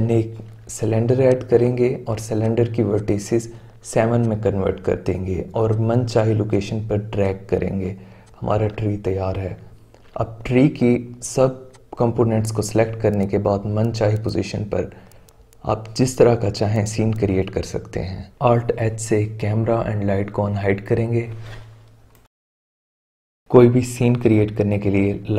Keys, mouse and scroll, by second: 2.3-4.2 drag, 4.7 click, 5.2 s, 5.7 s, 6.5 click, 6.9 s, 7.4-8.2 middle drag, 8.2 click, 8.8-10.0 middle drag, 10.0-10.8 shift+right drag, 11.7 click, 12.4 middle click, 12.6 click, 13.0-16.5 typing, 13.2 click, 13.8 click, 14.2 click, 14.4 middle click, 14.8 middle click, 15.1 click, 15.9 click, 16.8 click, 18.1 alt+h, 24.5-25.3 right drag.